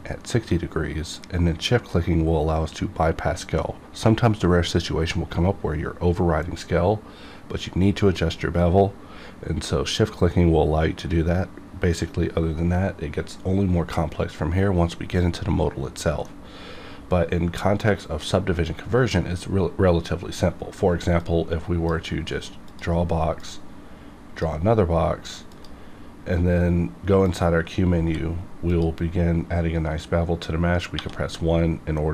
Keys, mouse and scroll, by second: 16.2-20.0 middle drag, 21.2-25.5 drag, 27.7 scroll up 1, 28.0 q, 28.7 click, 30.9 1.